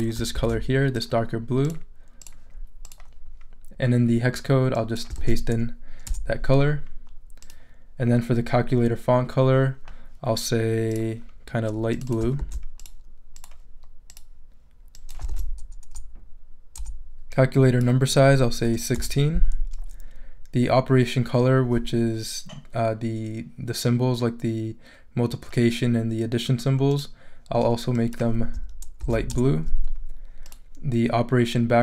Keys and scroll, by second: 0.3 super+c, 5.2 super+v, 6.1 super+Return, 12.4 super+c, 15.3 super+v, 15.9 super+Return, 16.4 Return, 18.2 l, 18.6 6, 18.9 Return, 29.0 super+v, 29.3 super+Return, 30.2 Return.